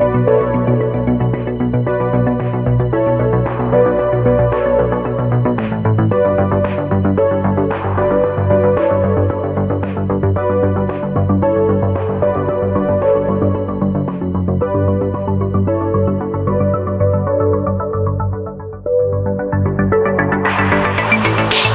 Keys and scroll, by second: 1.2 space, 15.6 ctrl+z, 16.7 space, 17.5 ctrl+z, 18.2 space.